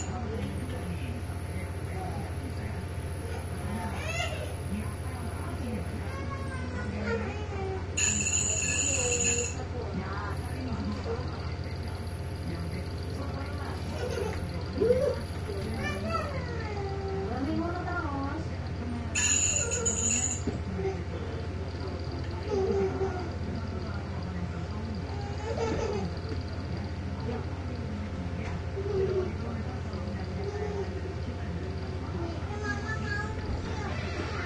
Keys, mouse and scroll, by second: 0.5 Down, 3.8 click, 6.0 click, 7.8 click, 9.9 shift+click, 10.6 click, 11.7 click, 15.2 ctrl+g, 16.0 ctrl+shift+click, 17.3 click, 18.9 click, 19.8-20.2 ctrl+scroll down 2, 21.0 click, 22.3 Right, 25.2 click, 28.6 shift+\, 29.9 click, 31.1 click, 32.5 Delete, 33.8-34.2 ctrl+scroll down 2.